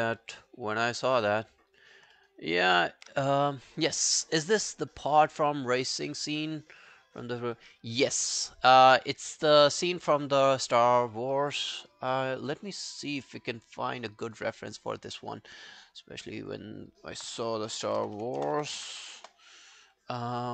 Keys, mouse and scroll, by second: 0.3 alt+scroll down 1, 0.3 alt+click, 2.2 alt+middle click, 2.4 alt+right click, 12.6 double click, 17.5-19.6 typing.